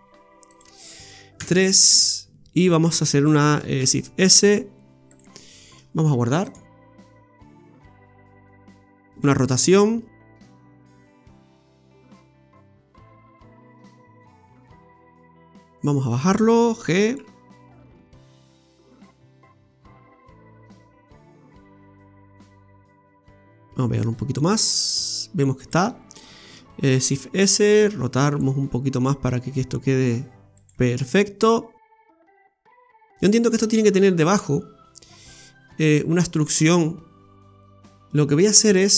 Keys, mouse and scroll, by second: 1.4 KP_3, 3.7 shift+s, 6.4 click, 9.2 r, 15.7-17.0 scroll down 1, 17.1 f, 18.4 g, 21.4-21.7 scroll up 5, 21.9 shift+middle click, 22.3 scroll up 2, 23.8 g, 26.9 shift+s, 28.3 r, 31.1-31.4 scroll down 1, 31.4 middle click, 32.4 scroll down 4, 32.9-33.8 scroll up 7, 33.8 middle click, 37.3 KP_Divide, 37.7 scroll down 2, 38.1 middle click.